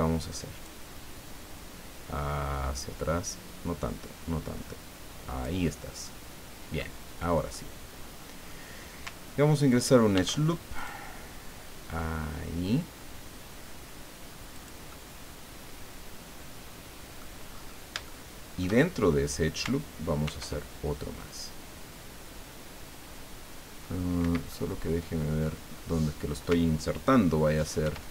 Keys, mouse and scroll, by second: 0.6-5.6 drag, 5.8 scroll down 1, 6.0 middle click, 7.5-8.6 middle drag, 10.1 ctrl+r, 10.8 click, 14.5 click, 14.9-17.3 middle drag, 17.5-17.9 scroll up 2, 18.0 shift+middle click, 20.2 ctrl+r, 24.3 Escape, 24.5-25.6 drag, 25.7 scroll up 1, 27.8 ctrl+r.